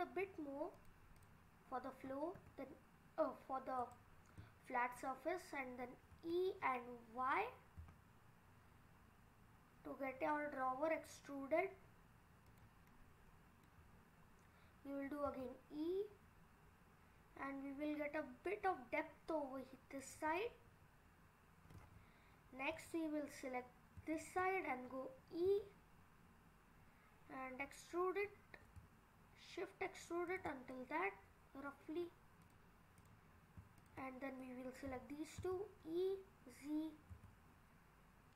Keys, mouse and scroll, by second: 1.2 click, 1.8-2.4 scroll down 2, 2.4 e, 4.4 middle click, 6.2 e, 12.9 middle click, 14.0-14.4 scroll up 4, 14.4-15.3 scroll down 1, 15.3 e, 20.4 middle click, 22.1-22.7 scroll up 2, 22.7 click, 24.1 shift+click, 24.6-25.2 scroll down 2, 25.5 e, 30.7 middle click, 32.4 click, 33.0 click, 33.8 ctrl+click, 34.4 middle click, 34.9 e.